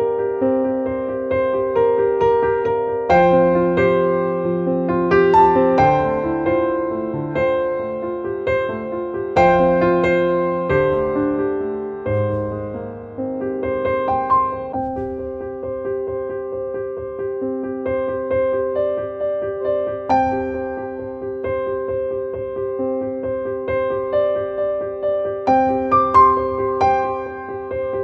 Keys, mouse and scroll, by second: 0.7 click, 3.8 click, 5.3 click, 6.7 click, 9.3-13.6 drag, 13.9-15.3 drag, 15.3-18.8 drag, 18.8-21.0 drag, 25.1 click, 27.7 click.